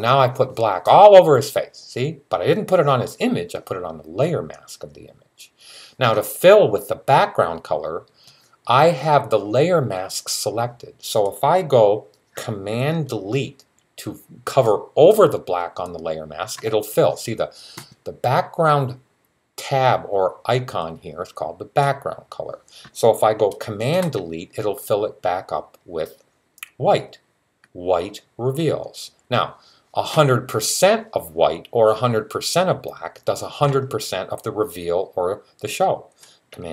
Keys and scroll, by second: 36.6 super+z.